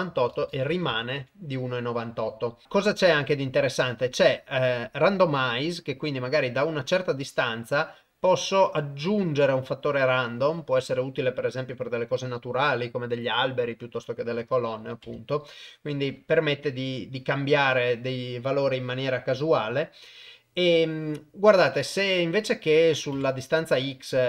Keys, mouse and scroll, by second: 0.1 ctrl+z, 3.0 click, 5.0-6.3 drag, 7.7-10.5 drag, 11.8 click, 14.6 click, 15.8 middle click, 22.9 click.